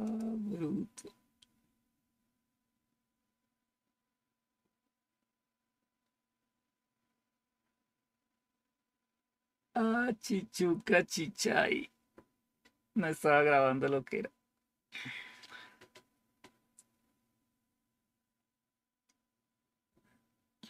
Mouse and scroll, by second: 0.0 click.